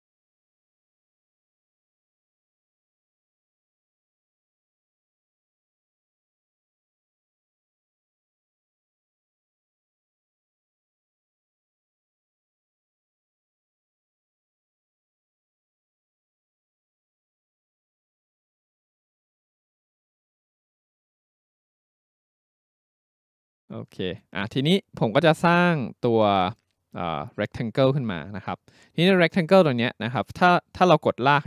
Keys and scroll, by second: 20.9 Delete, 22.2 Delete.